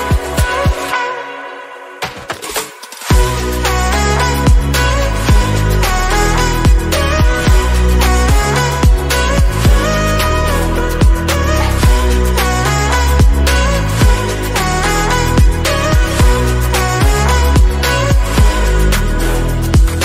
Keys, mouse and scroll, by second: 0.3 e, 1.4 middle click, 1.9 1, 2.2 scroll down 1, 2.4 shift+middle click, 3.4 f, 4.1 KP_1, 4.5-5.0 scroll up 4, 5.0 scroll down 1, 5.2 e, 6.1 scroll down 2, 6.3 shift+middle click, 6.8-7.3 scroll up 2, 7.4 click, 12.6 click, 12.9 scroll down 2, 13.2 middle click, 14.1 alt+z, 14.3 middle click, 14.6 scroll up 1, 14.8-16.0 shift+middle drag, 16.0 3, 16.3 click, 16.8 x, 18.2 /, 18.5 scroll down 2, 18.6-19.9 middle drag, 19.9 2.